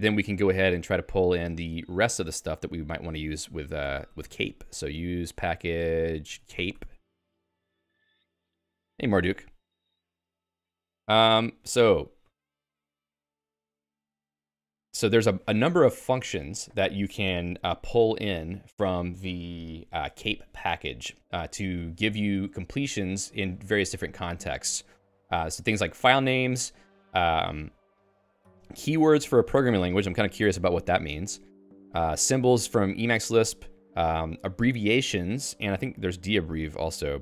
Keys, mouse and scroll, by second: 0.0-7.3 typing.